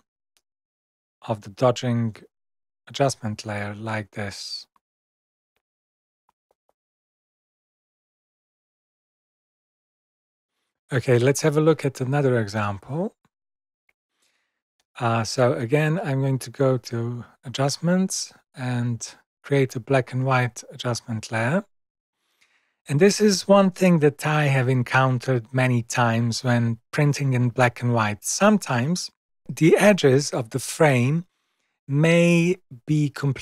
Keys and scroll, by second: 5.6 super+0, 5.9 super+-.